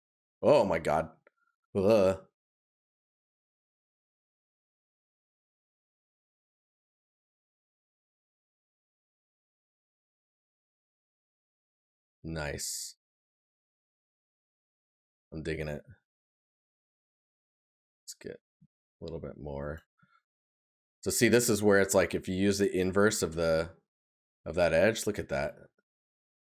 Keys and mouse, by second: 0.6 right click, 8.6 right click, 13.1 right click, 16.7 right click, 17.9 right click, 24.6 right click, 26.4 right click.